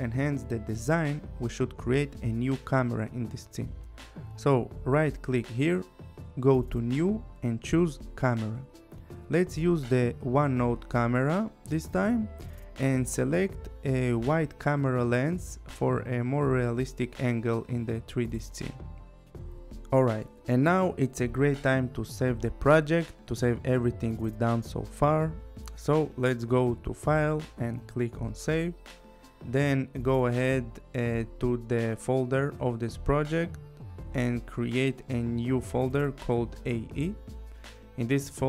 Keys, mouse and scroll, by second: 1.2 click, 5.4 click, 6.3 right click, 8.7 click, 10.7 click, 12.7 click, 18.4 click, 19.5 click, 26.5 click, 28.1 click, 29.6 click, 32.5 click, 33.3 right click, 35.5 click, 36.3-37.3 typing.